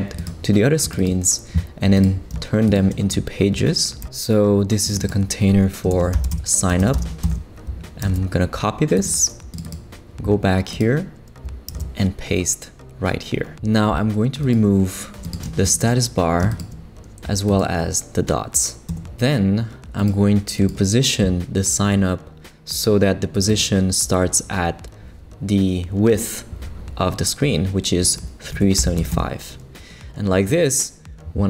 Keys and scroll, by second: 5.7-6.9 typing, 7.2 Return, 8.0 super+c, 11.7 super+v, 18.9 BackSpace, 28.3-29.5 typing.